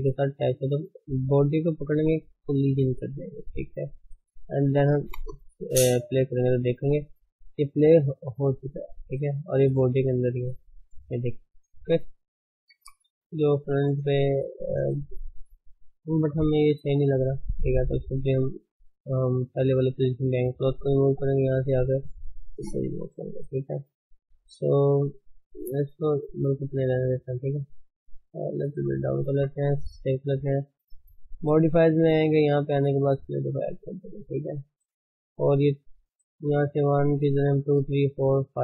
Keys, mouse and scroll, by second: 1.8 click, 3.0-3.9 drag, 4.4 scroll down 4, 5.1 space, 6.7-7.4 middle drag, 7.4-7.8 scroll up 3, 7.9-8.5 middle drag, 8.5-9.1 scroll up 3, 9.1 middle click, 9.3-10.2 middle drag, 10.2 click, 11.4-12.7 middle drag, 12.7 KP_1, 13.6 scroll down 3, 13.9 space, 14.4 scroll down 2, 14.6-15.2 middle drag, 15.3-16.2 middle drag, 16.2 KP_1, 16.5 scroll up 4, 17.3-20.6 shift+middle drag, 20.6-21.3 drag, 22.5-23.2 drag, 23.6-26.7 shift+middle drag, 24.1-24.8 scroll up 3, 24.2 Tab, 24.8 a, 25.2 s, 26.7 scroll down 1, 26.9 middle click, 27.7 s, 29.1-29.4 middle drag, 29.4 Tab, 33.2 click, 33.4 scroll down 2, 33.6 middle click, 34.1-36.9 scroll up 6, 34.4 middle click, 36.9-38.6 drag.